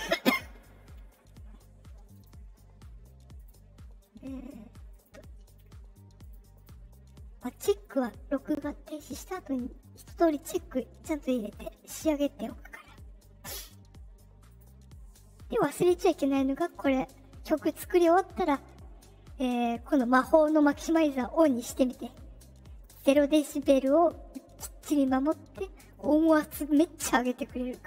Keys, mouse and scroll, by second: 2.1 click, 3.3 click, 4.9 click, 5.4 click, 6.2 click, 6.5 click, 7.5 click, 8.8 click, 11.5 click, 11.8 click, 14.4 click.